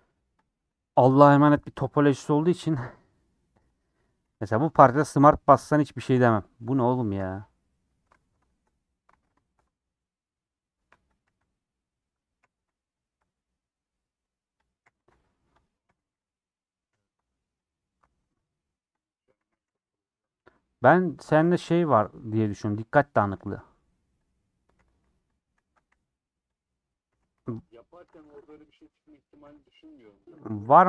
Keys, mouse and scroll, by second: 0.5 click, 2.2 click, 2.9 KP_1, 3.5 KP_Decimal, 3.8 middle click, 4.4 scroll down 2, 4.5 middle click, 5.1-5.6 scroll up 7, 5.6 middle click, 6.2 scroll down 1, 6.3 middle click, 6.7 scroll up 1, 6.9-8.2 middle drag, 8.2 alt+z, 8.5 shift+middle click, 8.7 scroll up 2, 9.1 alt+z, 9.4 shift+middle click, 9.6 scroll up 1, 9.7-11.2 middle drag, 11.2 click, 11.3 g, 12.4 g, 13.2-14.7 middle drag, 14.7 click, 14.8 g, 15.7 click, 15.9 g, 16.6 click, 17.0 g, 17.7 click, 18.0 alt+z, 19.1 click, 19.4 alt+z, 19.7 g, 20.9 click, 21.5 g, 22.5 click, 23.2 g, 24.3 click, 24.8-30.8 typing, 26.6 click, 28.9 click.